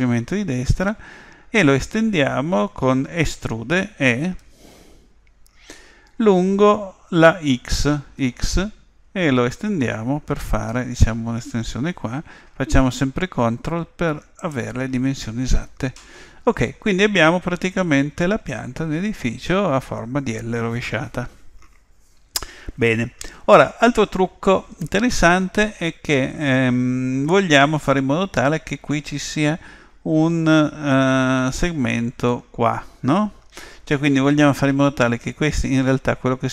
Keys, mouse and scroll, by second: 4.4 e.